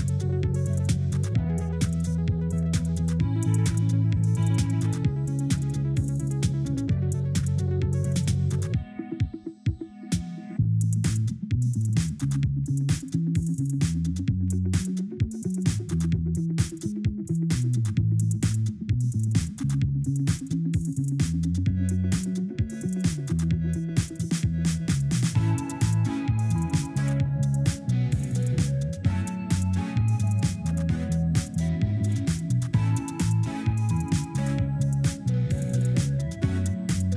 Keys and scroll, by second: 14.7 Escape, 23.7 Escape, 29.2 w, 29.4 1, 29.8 4, 33.9 Delete.